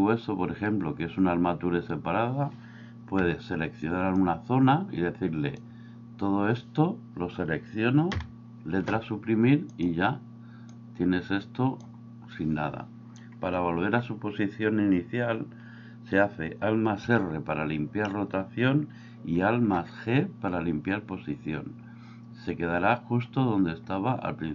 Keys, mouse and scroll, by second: 3.1 b, 8.1 Delete, 9.7 click, 10.7-11.8 drag, 17.0 alt+r, 19.4 alt+g.